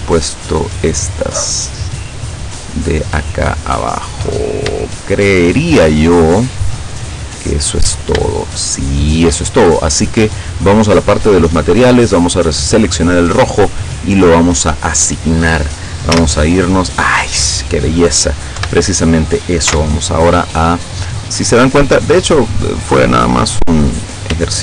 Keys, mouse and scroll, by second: 0.2 shift+right click, 1.2 shift+right click, 2.3 shift+right click, 2.8 shift+right click, 3.4 shift+right click, 3.8 shift+right click, 4.8 shift+middle click, 5.8-8.4 middle drag, 10.3 middle click, 11.4 click, 12.8 click, 14.2 click, 16.2 z, 18.6 KP_7, 19.8 z, 22.4 right click, 23.2 right click, 24.0 right click.